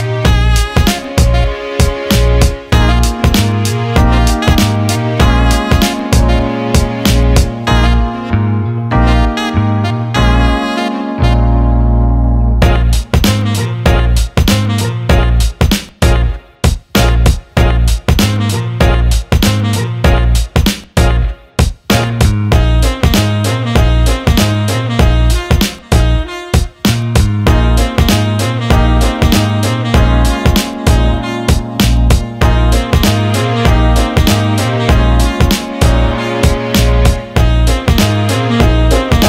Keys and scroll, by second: 2.5 Delete, 12.5 Escape, 16.8-18.0 typing, 19.4-20.4 typing, 32.8 Escape, 36.4 Escape.